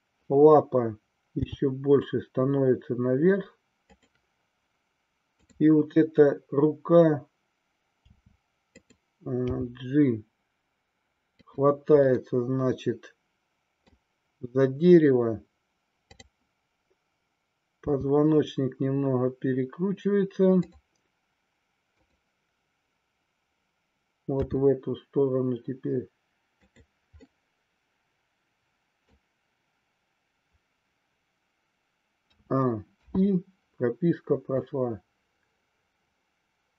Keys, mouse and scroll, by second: 1.4 g, 3.9 click, 8.0 r, 8.9 click, 9.5 g, 11.4 click, 12.0-13.9 middle drag, 16.0-17.2 drag, 17.9 r, 21.8-23.4 drag, 24.4 r, 26.7 click, 27.3-29.2 middle drag, 32.3 a, 33.0 i, 34.7-36.7 drag.